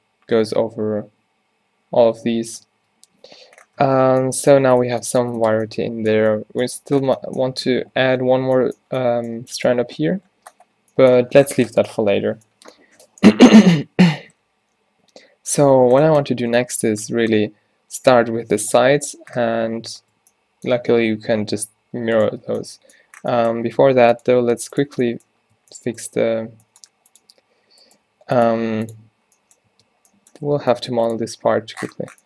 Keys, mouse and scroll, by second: 0.5 z, 1.0 z, 1.3 z, 2.7 Tab, 3.5 z, 3.9 Tab, 4.7 a, 14.4 z, 21.6 z, 22.6 Tab, 23.8 s, 24.5 g, 24.9 Tab, 25.6 Tab, 26.7 g, 27.4 r, 28.2 g, 28.8 g, 29.8 Tab, 30.5 Tab, 30.7 g.